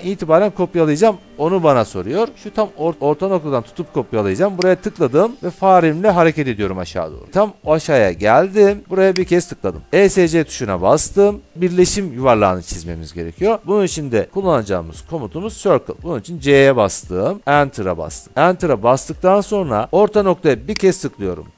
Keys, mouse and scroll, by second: 4.8 click, 9.5 click, 10.8 Escape, 16.0 c, 17.6 Return, 19.7 Caps_Lock, 21.0 click.